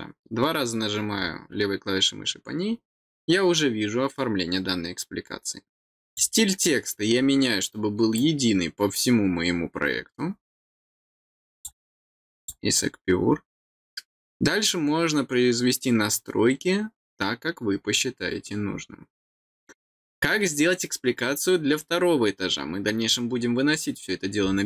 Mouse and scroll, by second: 6.0 click, 6.9-7.3 scroll down 3, 8.1-11.6 drag, 12.3 click.